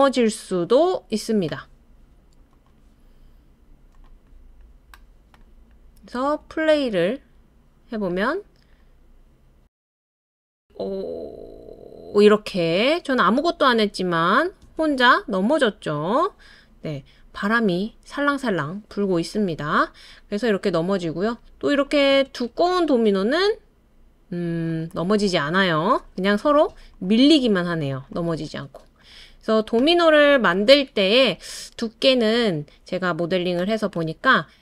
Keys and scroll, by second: 6.2 space, 14.6 space, 22.1 space.